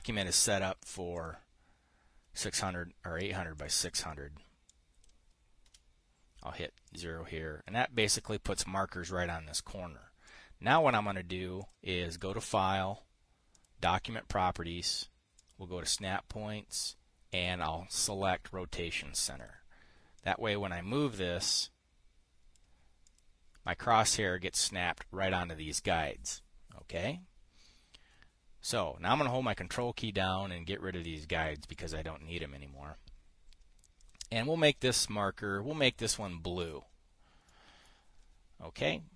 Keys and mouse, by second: 0.0 click, 0.2 Return, 0.4-1.9 drag, 4.1 click, 5.2 click, 6.1 KP_0, 7.3 click, 10.7 click, 12.1 click, 12.7 click, 14.0 click, 15.9 click, 17.8 click, 19.9 click, 20.6-23.1 drag, 23.5 click, 27.4 click, 30.2 ctrl+click, 31.8 ctrl+click, 32.2 click, 34.5 click, 36.6 click, 37.1 drag, 38.0-38.4 drag.